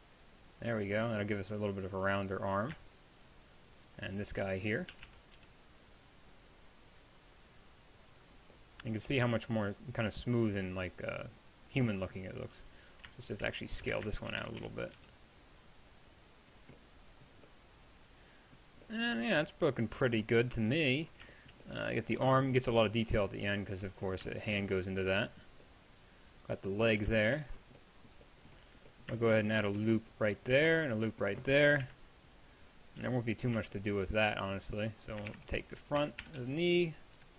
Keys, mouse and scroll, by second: 4.9 g, 8.4-12.1 middle drag, 12.6-13.9 right drag, 13.9 ctrl+z, 14.4 s, 25.9-29.8 middle drag, 29.8 ctrl+r, 31.9 KP_1, 33.0 KP_3, 35.3 ctrl+Tab, 36.0-37.3 typing.